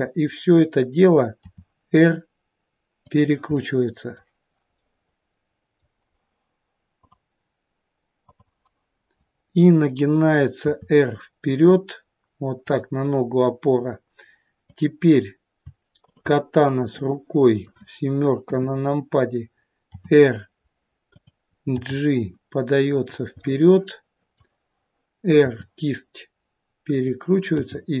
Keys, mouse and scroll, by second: 1.3 r, 3.5 middle click, 4.7 middle click, 10.5 r, 14.5 click, 15.9 shift+click, 16.6 middle click, 18.4 KP_7, 19.8 r, 21.7 g, 23.3 middle click, 23.3-24.5 scroll up 1, 25.3 r, 27.5 g.